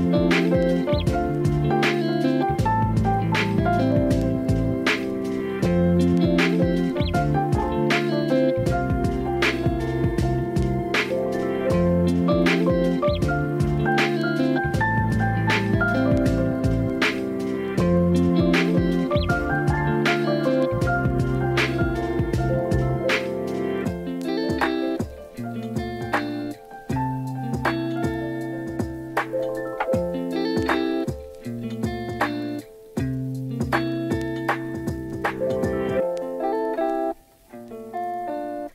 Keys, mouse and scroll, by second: 0.0 n, 1.0 shift+middle drag, 2.3 shift+a, 3.8 drag, 5.3-5.9 drag, 6.7 click, 7.2 click, 8.2 Tab, 8.6 alt+z, 9.6 s, 12.0 click, 12.8 x, 14.7 click, 18.5 x, 19.6 alt+shift+click, 20.3 KP_3, 21.2 shift+middle click, 21.7-23.0 right drag, 24.3 KP_1, 26.5 shift+middle click, 27.0 r, 31.5 s, 33.1 click, 35.3 click, 36.6 click, 37.6 x.